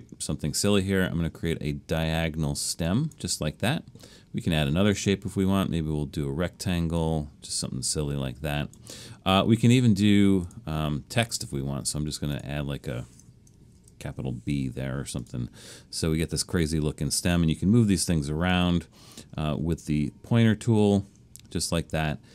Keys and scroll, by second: 13.8 shift+b.